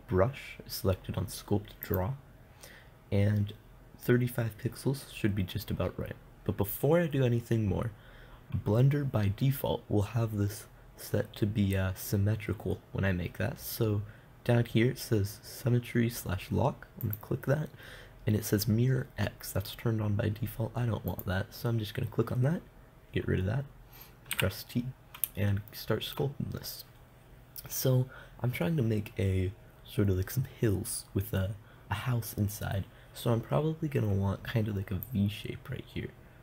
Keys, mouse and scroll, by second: 17.5-19.5 drag, 19.5-21.5 middle drag, 21.5-23.4 drag, 24.8 t, 35.5-36.4 drag.